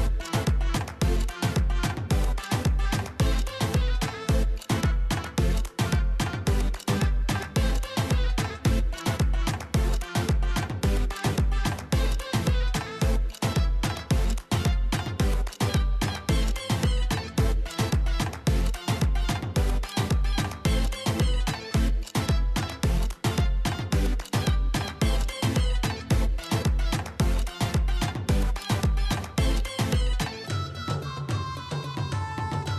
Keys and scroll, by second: 16.0 ctrl+a.